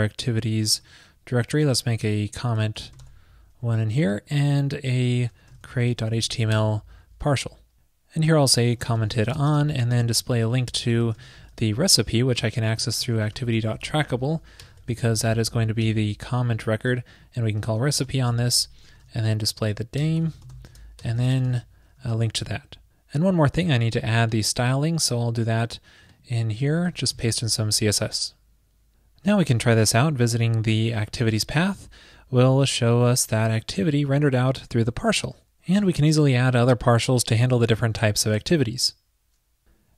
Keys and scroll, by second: 10.0 ctrl+shift+>, 18.5 alt+shift+Left, 18.5 alt+shift+Left, 18.6 alt+shift+Left, 21.6 super+v, 22.2 super+s, 26.9 super+v, 27.1 super+s.